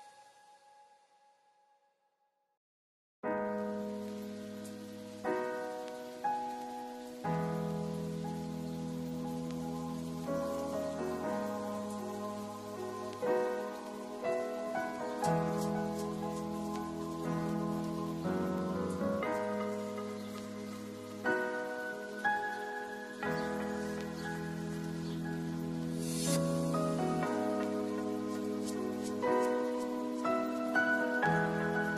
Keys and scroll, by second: 0.2 t, 9.9 0, 14.2 0, 17.6 0, 20.5 0, 24.3 6, 28.1 0, 30.9 0.